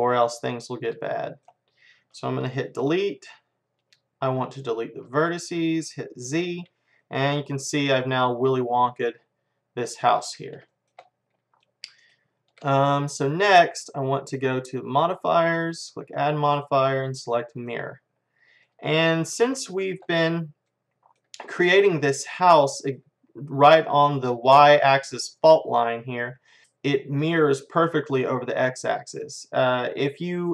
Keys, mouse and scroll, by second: 1.8-5.0 middle drag, 2.8 Delete, 6.3 z, 6.7-9.1 middle drag, 10.4-14.5 middle drag, 14.9-18.2 drag, 18.2-23.5 middle drag, 26.6-28.2 middle drag, 29.1-30.5 middle drag.